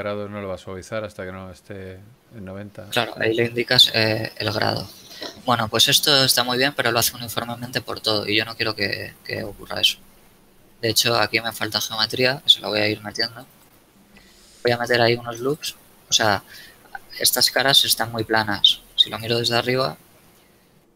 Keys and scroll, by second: 11.9 shift+Tab, 13.1 ctrl+r, 15.1 ctrl+r, 19.4 KP_7, 20.1 z.